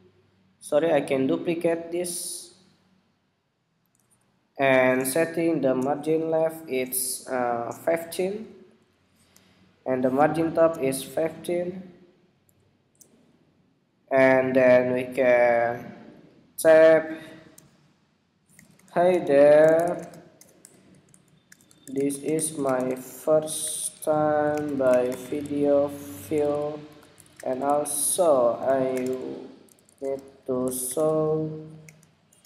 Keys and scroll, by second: 6.9 alt+shift+Left, 8.0 alt+Left, 8.8 alt+Left, 10.3 alt+shift+Down, 11.5 alt+Up.